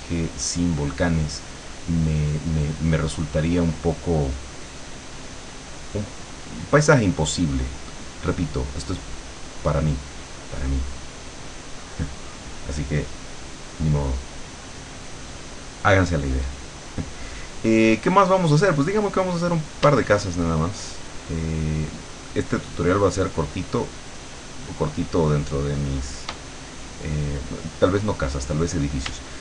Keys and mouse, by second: 1.5 click, 2.7 click, 3.3 click, 4.5-6.5 drag, 9.5 click, 10.7 click, 13.2-14.4 drag, 21.1-26.3 shift+drag.